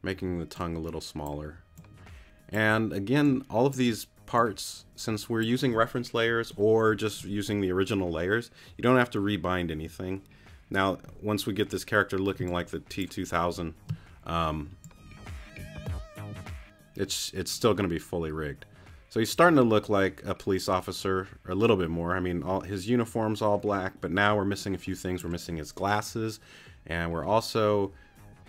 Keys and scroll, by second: 12.4 space.